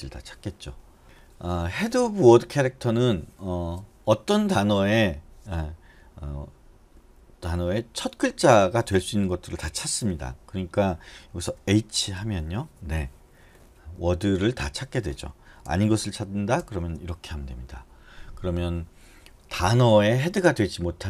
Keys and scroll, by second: 11.7 BackSpace, 12.2 h, 16.8 shift+h.